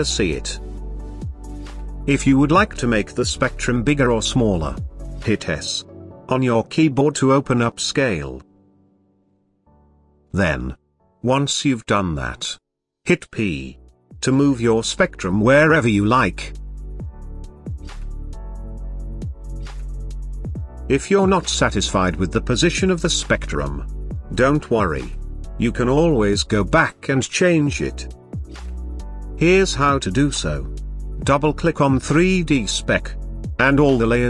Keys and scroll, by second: 5.2 s, 13.0 p.